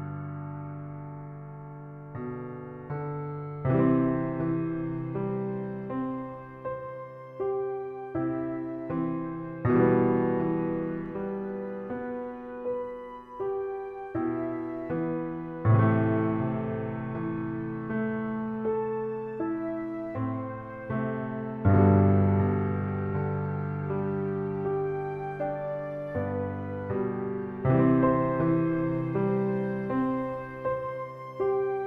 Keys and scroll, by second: 1.2 shift+e, 1.8 e, 2.9 shift+e, 3.4 e, 4.4 s, 6.8 shift+e, 8.1 s, 10.7 shift+e, 13.2 s, 15.8 shift+e, 16.3 e, 17.6 s, 18.9 shift+e, 20.5 w, 21.2 s, 23.2 shift+e, 24.6 s, 27.0 shift+a, 27.3 shift+a, 28.1 shift+a.